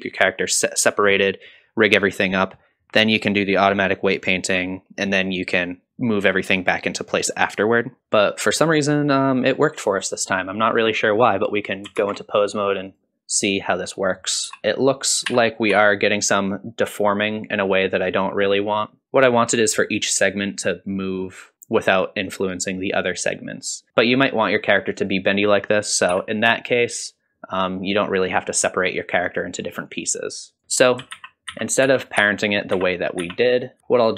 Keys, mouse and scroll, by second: 9.1-11.2 middle drag, 12.0 ctrl+Tab, 12.4 middle click, 12.7 scroll down 1, 12.9 click, 13.4 click, 14.5 r, 14.6 alt+g, 14.6 middle click, 14.6 scroll up 1, 15.3 r, 19.0-19.8 middle drag, 23.9 ctrl+z, 23.9 click, 24.0 middle click, 25.0 click, 26.1 r, 30.5 click, 31.1 ctrl+z, 31.5 ctrl+z, 31.8 ctrl+z, 32.2 ctrl+z, 32.7 ctrl+z, 33.2 ctrl+z, 33.8 ctrl+shift+z, 33.8 ctrl+s, 33.8 click, 33.8 middle click.